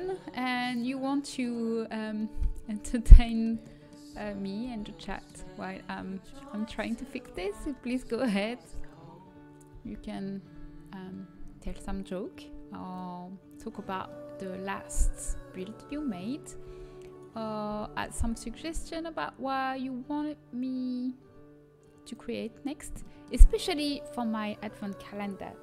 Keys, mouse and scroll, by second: 4.1 z, 4.6 z, 6.3-8.9 right drag, 9.0 right click, 9.7 g, 13.8 middle click, 14.9 z, 15.9 z, 16.6 z, 17.7 z, 18.0 g, 22.3-24.2 middle drag.